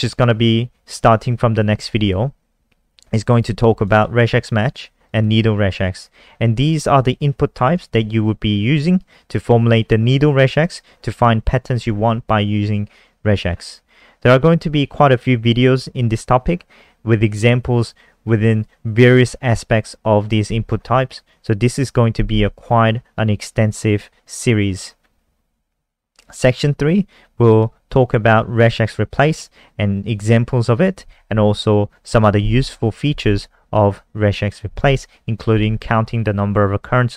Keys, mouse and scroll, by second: 3.9 click, 5.0 click, 5.2 click, 6.6 click, 24.7-26.2 scroll down 1, 26.2 click.